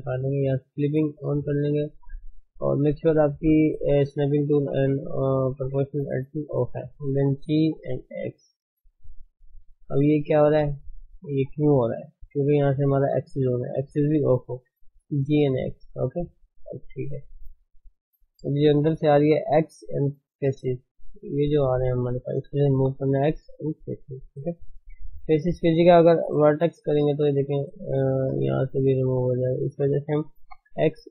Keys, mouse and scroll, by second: 1.1 click, 7.6 g, 13.8 click, 14.9 g, 16.6-17.8 middle drag, 17.8-18.1 scroll up 3, 18.1-23.9 middle drag, 23.9 x, 24.2-25.4 middle drag, 25.4 ctrl+z, 27.1 x, 27.3-28.3 middle drag, 28.8 middle click, 29.6 ctrl+z.